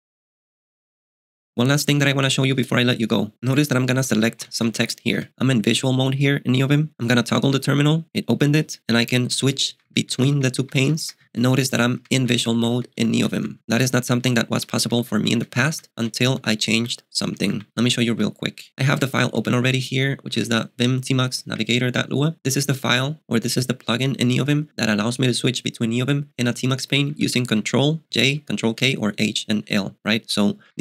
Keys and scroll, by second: 3.8-5.6 typing, 7.3 alt+t, 9.4 ctrl+k, 9.7 ctrl+j, 9.8 ctrl+k, 10.1 ctrl+j, 10.3 ctrl+k, 10.6 ctrl+j, 11.0 ctrl+j, 11.2 ctrl+k, 11.3 ctrl+j, 11.5 ctrl+k, 11.7 ctrl+j, 11.9 ctrl+k, 12.3 ctrl+k, 12.5 ctrl+j, 12.7 ctrl+k, 12.9 ctrl+j, 13.1 ctrl+k, 13.3 ctrl+j, 13.6 ctrl+k, 14.8 ctrl+j, 15.0 ctrl+k, 15.1 ctrl+j, 15.3 ctrl+k, 15.5 ctrl+j, 15.7 ctrl+k, 16.0 ctrl+j, 16.4 ctrl+k, 16.8 ctrl+j, 17.2 ctrl+k, 17.5 ctrl+j, 18.1 alt+t, 19.3 shift+h, 20.3 j, 20.4 j, 20.5 j, 21.5 Return, 26.9-27.4 j, 27.5 j, 30.4-30.8 typing.